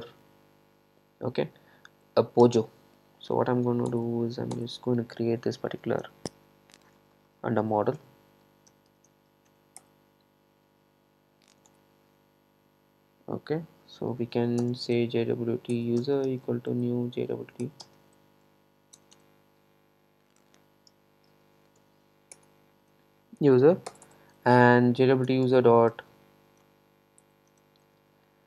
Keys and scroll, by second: 4.0 alt+Return, 17.1 Return, 22.4 Return, 27.3 Return.